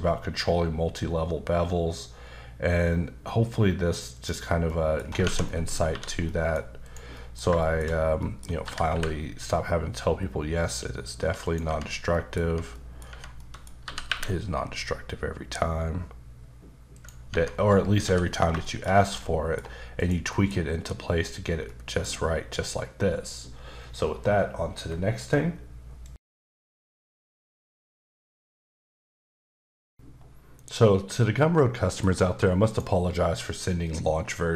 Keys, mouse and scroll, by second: 4.1 click, 4.6 middle click, 5.1 scroll up 1, 5.2 Tab, 5.4 middle click, 5.9 3, 6.2 middle click, 6.8 click, 7.1 middle click, 7.6 shift+middle click, 7.8-8.2 shift+scroll up 2, 8.2 middle click, 8.5 scroll up 1, 8.6-8.9 typing, 11.4 click, 11.6 Tab, 12.1 middle click, 12.7 middle click, 13.1 Tab, 13.4 middle click, 13.7 scroll up 1, 13.8 g, 16.2 g, 16.9 click, 17.3 Tab, 17.6-18.0 scroll down 2, 18.0 h, 18.2 scroll down 3, 18.6 shift+middle click, 18.9 scroll down 2, 19.2 middle click, 20.0 click, 20.3 middle click, 21.7 middle click, 32.7 shift+right click, 33.8 middle click.